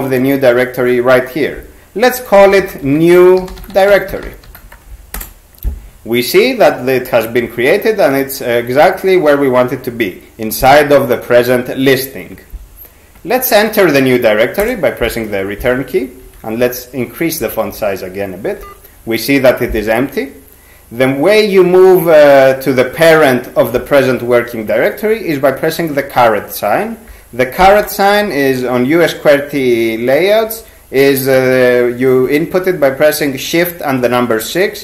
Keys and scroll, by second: 2.1-5.1 typing, 14.6 Return, 16.2 ctrl+x, 17.4 ctrl+=, 17.6 ctrl+=, 17.8 ctrl+=, 18.6 ctrl+g, 27.6 ^.